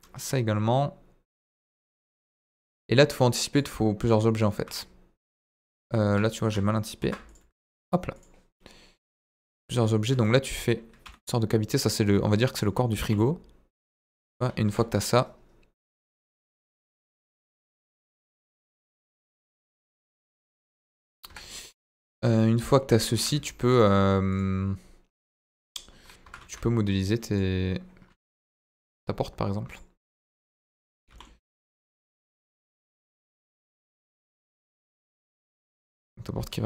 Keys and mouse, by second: 1.9 click, 2.5 middle click, 3.5 click, 3.9 click, 5.2 click, 5.4 middle click, 6.0 KP_1, 7.0 ctrl+r, 8.1 click, 9.0 click, 9.6 middle click, 10.2 middle click, 11.0 e, 11.1 middle click, 11.7 click, 11.8 middle click, 13.0 g, 13.0 middle click, 13.7 click, 13.9 middle click, 14.2 Tab, 14.6 KP_1, 15.7-16.6 drag, 17.7-20.2 drag, 20.4-20.7 middle drag, 21.2 KP_1, 23.0 shift+a, 23.9 middle drag, 24.3 click, 26.2 KP_1, 26.3 shift+a, 28.3 Delete, 28.5 shift+a, 31.0 g, 32.0 ctrl+click, 32.8 Tab, 33.0 middle click, 34.0 KP_1, 35.1 g, 35.2 middle click, 36.6 click.